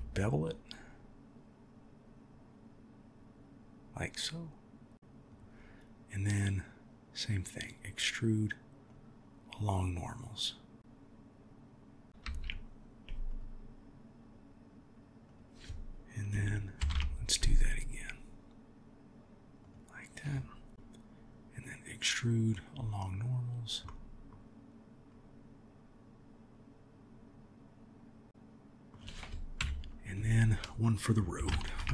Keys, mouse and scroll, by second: 6.5-7.7 drag, 8.9-12.1 drag, 12.2 ctrl+r, 16.8 ctrl+b, 21.6-22.7 drag, 23.8 middle click, 25.2-28.3 drag, 28.3 middle click, 29.6 KP_1, 31.6 ctrl+r.